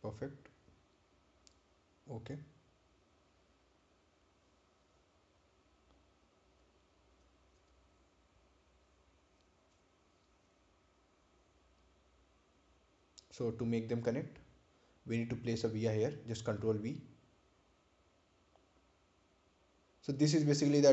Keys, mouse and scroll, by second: 6.5 right click, 7.7 click, 9.0 ctrl+click, 10.9 ctrl+click, 18.9-19.4 scroll up 1, 19.8 ctrl+v.